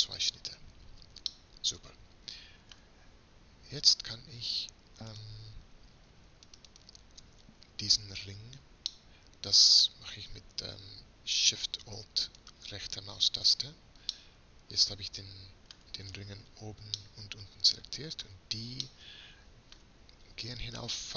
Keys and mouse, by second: 0.3 click, 0.6 middle click, 1.5 click, 1.8-3.8 middle drag, 3.8 right click, 4.5 middle click, 4.6 right click, 4.6-7.9 middle drag, 7.9-9.1 right drag, 10.8-14.4 middle drag, 14.4 middle click, 15.2 middle click, 15.5-21.1 middle drag.